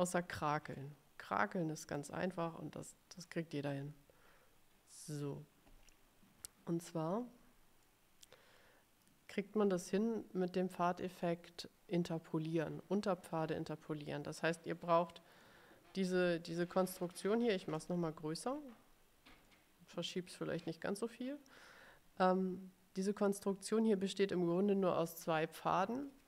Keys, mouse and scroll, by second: 1.0-2.2 middle drag, 2.7 ctrl+scroll up 2, 8.0-9.3 drag, 16.8 middle click, 17.7-19.1 ctrl+scroll up 4, 19.7 click.